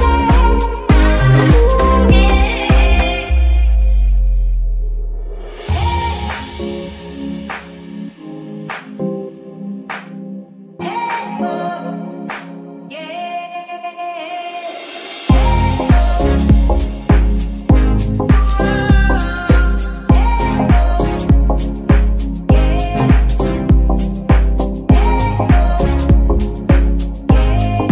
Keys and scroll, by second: 3.0 Escape, 3.7 g, 4.5 Escape, 7.7 g, 8.2 Escape, 8.5 Tab, 10.9 ctrl+Tab, 23.9 ctrl+Tab, 25.7 r, 26.0 x, 27.2 Escape.